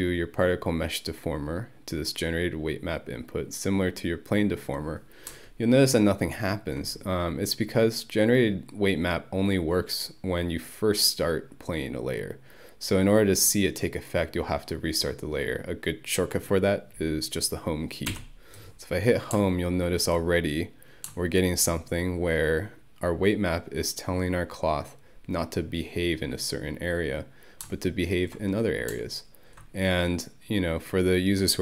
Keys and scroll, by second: 18.1 Home.